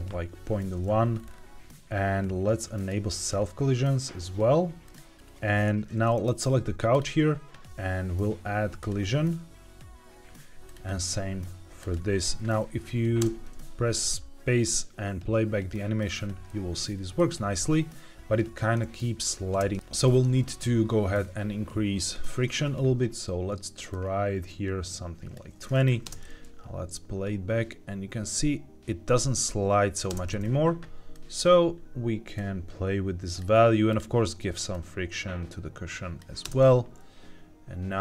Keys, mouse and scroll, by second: 1.1 scroll down 2, 1.7-2.7 scroll down 1, 2.7 click, 3.2 scroll down 2, 4.8 click, 5.0-5.5 scroll down 3, 6.8-7.7 drag, 8.7 click, 10.6 click, 11.7 click, 13.1 space, 16.5 middle click, 19.7 middle click, 19.7 space, 23.8-25.4 drag, 26.0 space, 30.0 space, 31.1 click, 32.3-33.3 drag, 33.8 click, 34.6-36.1 drag, 36.4 space.